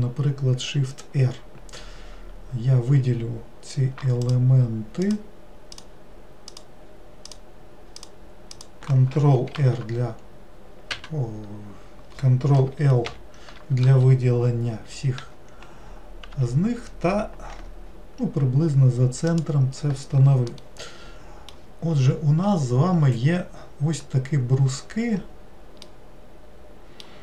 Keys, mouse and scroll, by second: 4.3 shift+click, 5.1 shift+click, 5.8 shift+click, 6.5 shift+click, 7.3 shift+click, 8.1 shift+click, 8.6 shift+click, 9.6 ctrl+r, 20.6-22.0 middle drag, 22.0-25.2 scroll up 8, 25.9-27.2 middle drag.